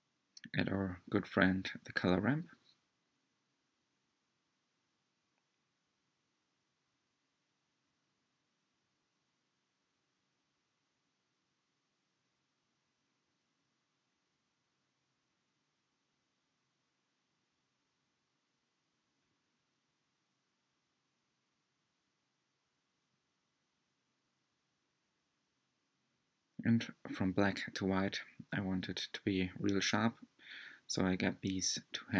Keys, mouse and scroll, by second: 2.8 ctrl+shift+click, 5.1-10.7 drag, 14.0-16.4 drag, 16.4-17.4 scroll up 4, 19.9-22.9 drag, 23.1-23.6 scroll down 3, 30.6 ctrl+shift+click.